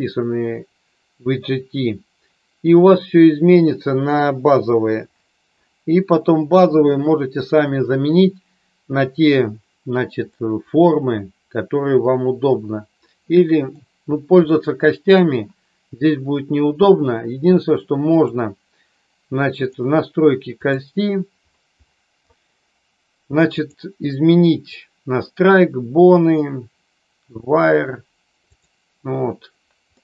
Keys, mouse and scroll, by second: 10.4-13.8 middle drag, 14.4 middle click, 18.0 click, 23.6-28.6 drag, 29.9 middle click.